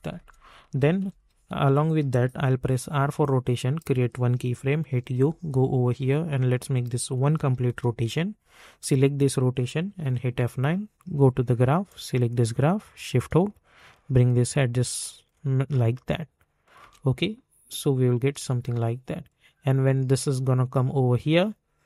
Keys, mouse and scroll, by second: 1.0 typing, 2.3-3.0 typing, 3.6 click, 4.2-5.6 typing, 6.7 click, 7.1 1, 7.6 Return, 8.8 click, 9.9 F9, 11.1-15.9 drag, 16.8 space, 19.2-21.8 drag.